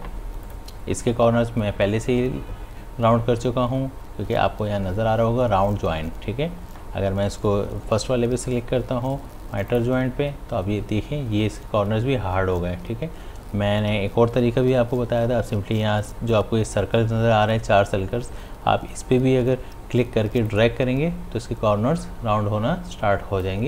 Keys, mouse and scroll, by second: 0.5 click, 9.7 click, 20.5-23.6 drag.